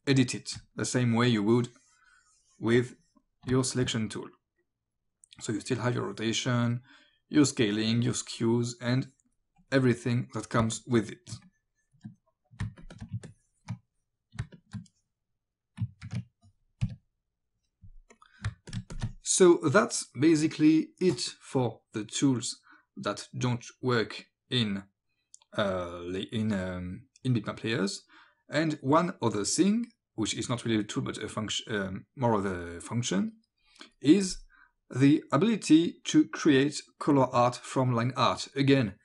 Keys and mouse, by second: 1.4 click, 3.5 space, 3.6 click, 5.2 click, 7.7 click, 8.9 click, 10.8 click, 10.8 space, 11.5 click, 12.6 alt+space, 13.3 ctrl+click, 14.4 space, 14.6 click, 16.1 ctrl+a, 18.2 click, 18.5 space, 18.7 click, 33.9 click.